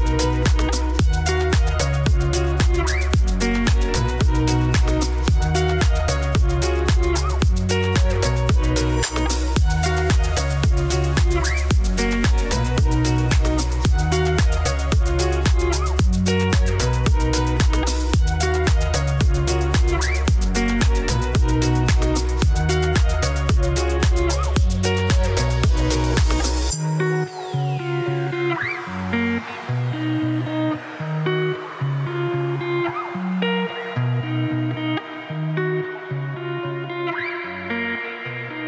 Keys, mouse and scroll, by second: 0.4 ctrl+click, 0.8 g, 2.3 click, 2.5 Tab, 2.8 click, 2.9-4.1 middle drag, 4.3 shift+middle click, 5.1 click, 5.4-6.2 scroll down 1, 6.2 shift+middle click, 6.9 scroll down 1, 7.0 middle click, 7.5 m, 10.3-11.5 scroll up 1, 14.6 click, 15.4 shift+d, 16.3 click, 16.7 click, 17.2 r, 19.5 middle click, 19.9-21.1 scroll up 1, 21.5-22.7 middle drag, 23.7 KP_1, 24.3 z, 24.5 shift+middle click, 24.8 scroll up 3, 25.0 shift+middle click, 25.5 g, 28.1 Tab, 28.7 1, 29.9 Tab, 30.4 Tab, 30.6 a, 32.5 Tab, 32.8 g, 37.5 Tab, 37.8 1, 38.1 shift+middle click, 38.3 scroll up 2.